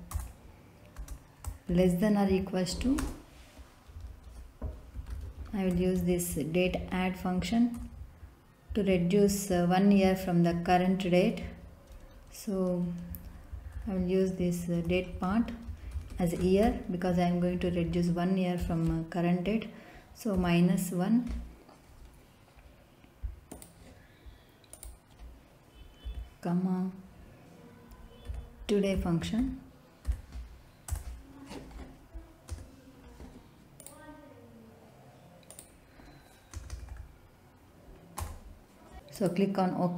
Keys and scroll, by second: 0.1 Return, 0.9 space, 1.7 shift+,, 2.2 =, 2.9 space, 4.9 d, 5.1 a, 5.7 t, 5.9 e, 6.9 Down, 7.7 Return, 13.7 ', 15.2 Left, 15.9 y, 16.1 e, 16.3 a, 16.6 r, 17.8 Right, 18.5 /, 20.3 -, 26.0 /, 28.2-30.0 typing, 30.8 Return, 32.5 BackSpace, 36.5 BackSpace, 38.1 Return.